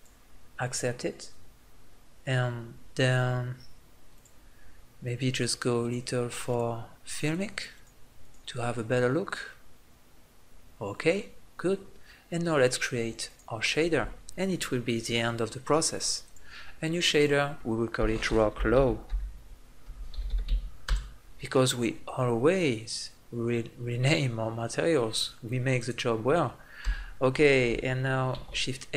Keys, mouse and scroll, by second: 11.1-13.1 middle drag, 20.6-25.0 middle drag, 25.0 click, 25.6-26.6 right drag, 26.6 Delete, 28.1 shift+a.